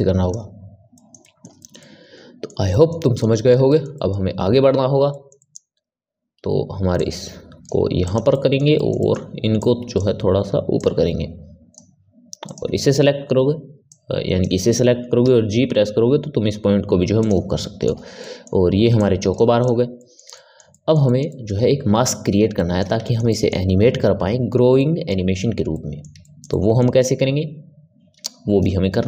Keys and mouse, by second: 0.8-6.9 ctrl+middle drag, 6.9 click, 7.9 click, 8.2-9.5 middle drag, 9.5-10.7 drag, 12.4 click, 13.8 click, 15.1 g, 17.5-18.9 middle drag, 18.9 click, 19.5 click, 19.9-29.0 middle drag.